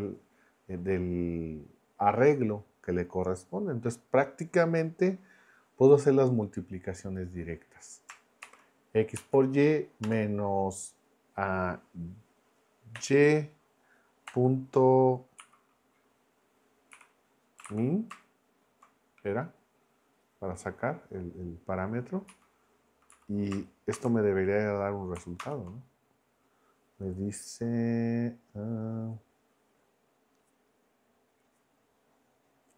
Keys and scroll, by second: 8.4 shift+9, 9.2 Right, 10.0 -, 12.9 y, 14.2 ., 15.4 m, 16.9 e, 17.6 a, 18.9 n, 22.3 Right, 23.1 Left, 23.9 shift+0, 25.4 ctrl+Return.